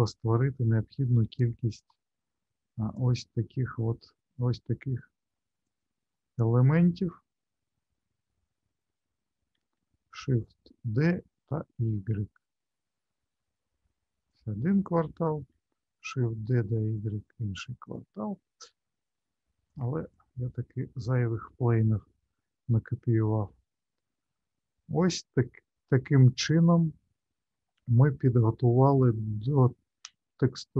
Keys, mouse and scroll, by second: 1.9 ctrl+z, 2.9 click, 5.6 shift+click, 9.6 shift+d, 15.6 shift+d, 18.6-19.7 scroll down 6, 19.7 click, 20.1 click, 21.5 Delete, 22.8 middle click, 23.7-25.0 scroll up 7, 25.0 middle click.